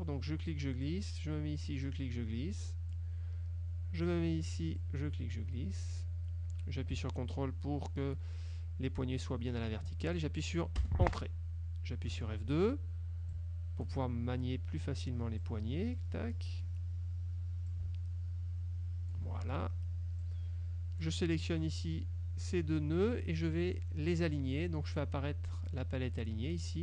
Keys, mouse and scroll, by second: 1.9-3.2 drag, 4.8-10.0 drag, 10.9 Return, 12.2 F2, 13.4 ctrl+click, 15.6-17.0 drag, 17.8-19.4 ctrl+drag, 20.3 click.